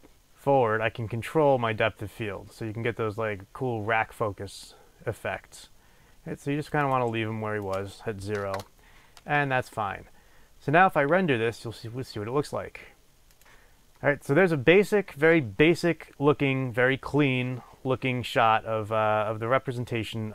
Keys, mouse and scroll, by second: 8.6 Return.